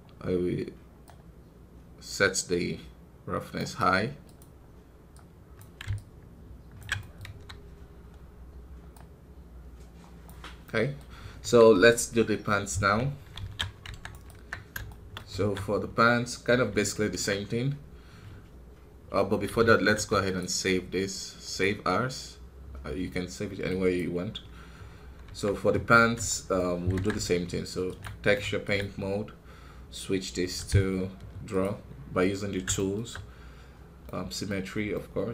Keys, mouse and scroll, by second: 1.0-5.0 drag, 5.9-6.9 ctrl+alt+drag, 6.9 middle click, 7.2 KP_1, 7.7 scroll down 2, 8.9-10.5 drag, 10.5 middle click, 11.0 scroll up 2, 11.3 KP_1, 12.9 Tab, 13.3 alt+a, 13.8 Tab, 14.0 right click, 14.2 Tab, 14.8 shift+middle click, 15.3 alt+a, 16.8-18.0 shift+middle drag, 18.0 scroll down 2, 20.3-24.4 drag, 24.7 scroll up 2, 25.2 Tab, 26.2-27.9 shift+middle drag, 27.9 ctrl+Tab, 28.6 z, 31.5 space, 32.7-35.3 shift+middle drag.